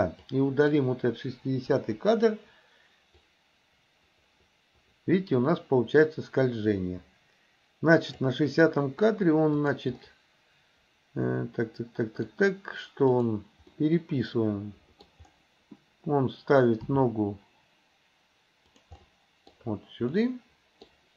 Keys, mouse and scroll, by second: 0.2-0.8 drag, 1.8 Delete, 3.3-8.3 drag, 9.6 click, 10.0-12.3 middle drag, 13.2 click, 13.7-15.1 middle drag, 16.8 g, 19.0 middle click, 20.2 scroll up 1, 20.3 middle click.